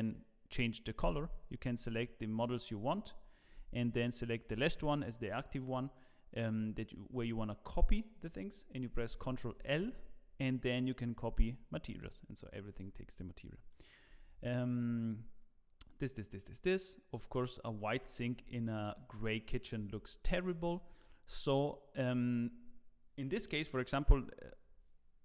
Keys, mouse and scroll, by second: 1.7 shift+click, 3.5 shift+click, 4.1 shift+click, 9.2 ctrl+l, 12.0 click, 13.1-13.5 scroll up 2, 13.7 shift+middle click, 14.2-14.5 scroll down 2, 14.5 shift+middle click, 16.5 click, 17.5 middle click, 18.0 shift+middle click, 18.5 scroll up 3, 18.7 middle click, 19.4 shift+middle click, 20.3 shift+middle click, 20.3 scroll up 4.